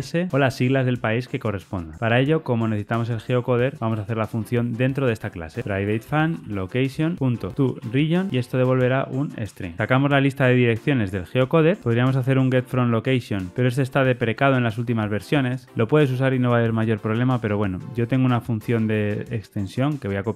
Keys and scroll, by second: 11.8 Tab.